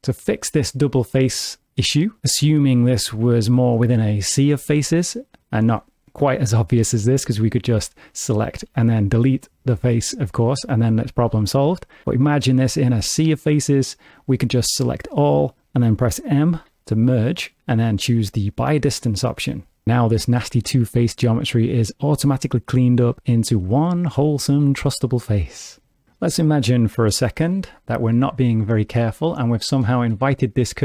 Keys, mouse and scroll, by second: 0.9 ctrl+middle click, 7.7 3, 8.0 click, 8.6 x, 11.0 ctrl+z, 14.5 a, 16.6 m, 23.9 alt+z, 25.6 middle click, 26.2 middle click, 28.1 3, 28.9 shift+middle click, 29.9 click, 30.3 middle click.